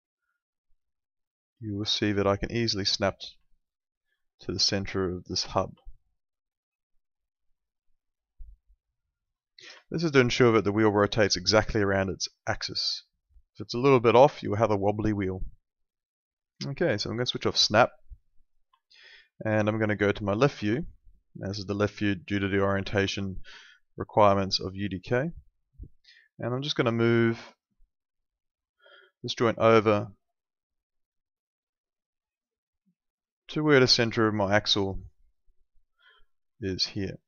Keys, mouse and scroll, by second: 3.5 alt+middle click, 5.8 alt+middle click, 9.8 alt+middle click, 17.3 click, 18.8 alt+middle click, 20.5 l, 21.0 middle click, 23.0 F3, 23.5 middle click, 28.6 click, 32.6 middle click.